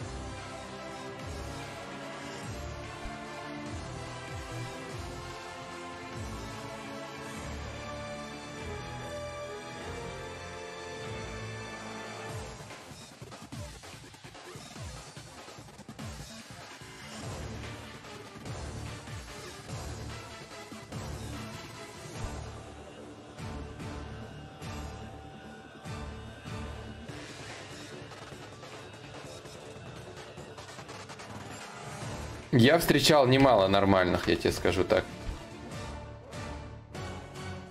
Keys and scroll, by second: 1.3 1, 24.8 4, 34.1 1.